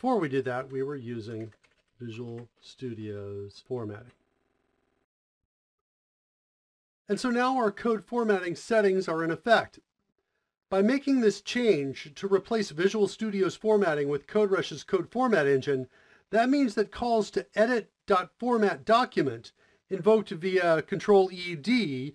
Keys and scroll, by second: 0.4-5.7 typing.